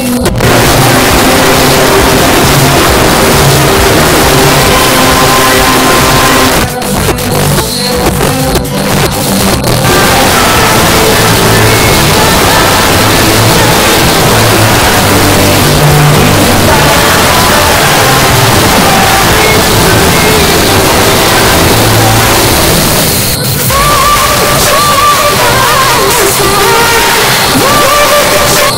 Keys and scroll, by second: 6.5 Page_Down.